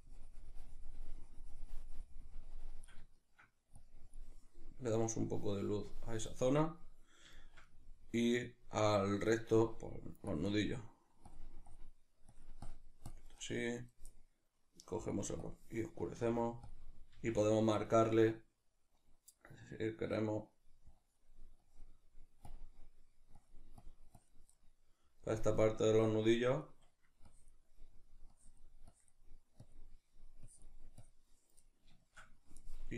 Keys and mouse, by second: 3.2 shift+middle click, 3.8-7.4 drag, 7.4-10.3 shift+middle drag, 10.3 click, 10.7 middle click, 11.3-14.8 drag, 14.8-16.2 middle drag, 16.2 f, 16.7 click, 17.2 f, 17.9 click, 24.6-25.9 middle drag, 25.9 click, 26.7 middle click, 27.3-31.7 drag, 31.7-32.9 middle drag.